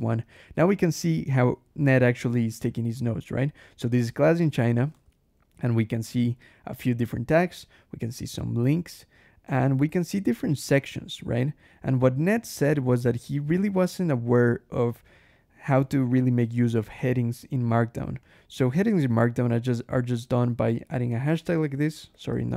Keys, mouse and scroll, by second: 1.9 ctrl+shift+h, 2.5 ctrl+shift+click, 2.8 ctrl+shift+Escape, 3.1 ctrl+shift+k, 4.5 click, 4.8 Escape, 4.9 j, 6.5 click, 8.8 scroll down 1, 9.7 scroll down 1, 10.7 click, 11.2 scroll down 1, 12.2 click, 12.5 scroll down 1, 13.5 click, 14.2 scroll down 1, 14.9 scroll down 1, 15.7 click, 16.5 click, 17.0 scroll down 1, 18.1 click, 18.6 scroll down 1, 19.2 scroll up 1, 20.0 click, 20.3-22.5 typing, 21.1 shift+Escape.